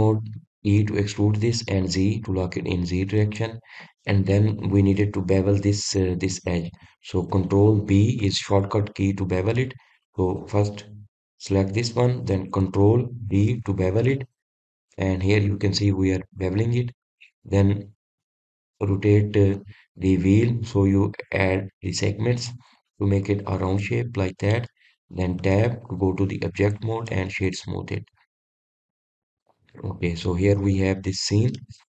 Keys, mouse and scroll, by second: 5.9 click, 9.9 ctrl+b, 13.1 click, 15.2 ctrl+b, 24.5 click, 25.1-27.1 middle drag, 27.1 Tab, 27.6-28.2 scroll down 1, 28.2-28.6 middle drag, 28.6-29.6 right drag, 29.6-30.0 scroll up 1, 30.0-30.4 scroll down 1, 30.4 click, 30.9-31.9 middle drag.